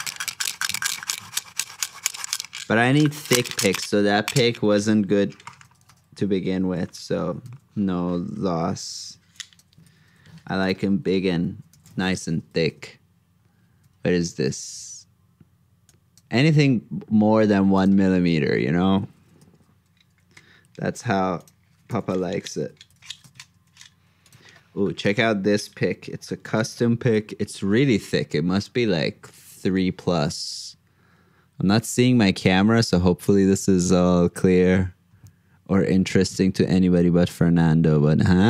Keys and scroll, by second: 1.5 super+Tab, 2.0 super+Up, 2.9 super+f, 6.7 super+g, 9.8 super+c, 10.0 super+Tab, 12.4 super+v, 19.4 super+v, 23.6 super+s, 27.4 super+Up.